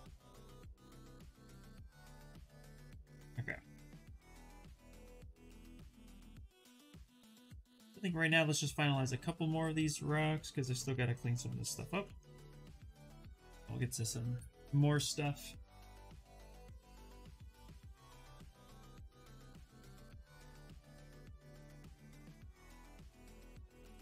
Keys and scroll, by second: 9.3 s.